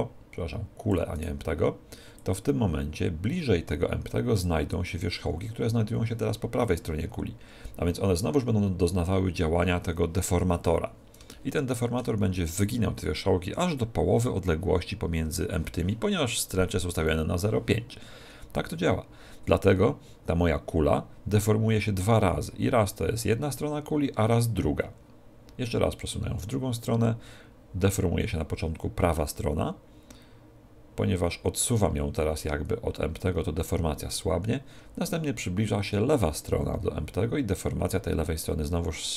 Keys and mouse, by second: 1.2 right click, 2.2 click, 11.3-18.5 middle drag, 18.5 click.